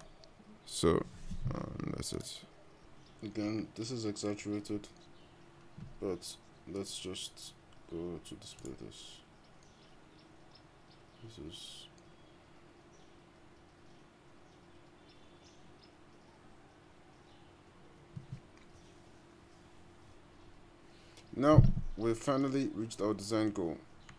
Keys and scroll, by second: 2.8 g.